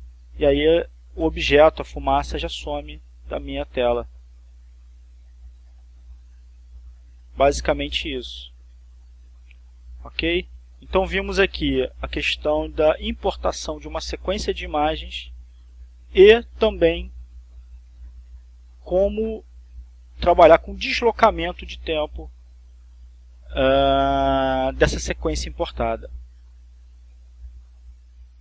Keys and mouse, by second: 9.2-16.4 drag, 17.4 click, 19.2-21.6 drag, 26.0-28.2 drag.